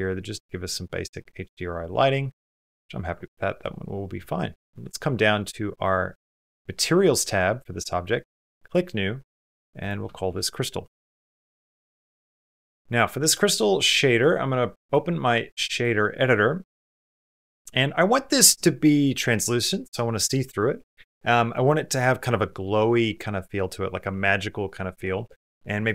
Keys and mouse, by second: 1.4-2.9 middle drag, 3.0 shift+middle click, 8.4 click, 9.6-11.8 drag, 12.7 click, 13.7 click, 14.8 click.